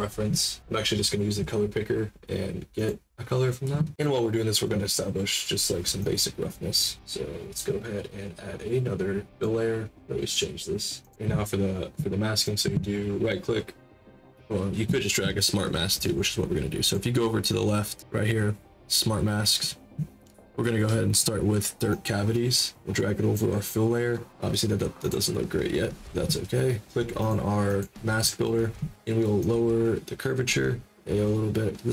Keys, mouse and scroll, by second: 0.6-2.7 middle drag, 2.7 click, 5.9-6.9 drag, 9.3 click, 11.0 click, 12.3 right click, 15.9 click, 16.8 click, 21.8-23.3 drag, 25.0 click, 27.1 click, 27.6 click, 29.4-31.9 drag.